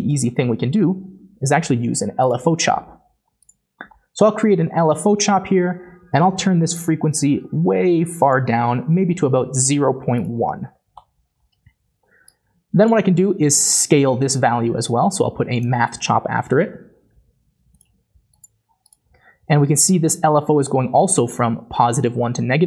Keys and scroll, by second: 0.1 typing, 1.7-3.3 typing, 10.7 BackSpace, 10.9 Return, 16.3 typing.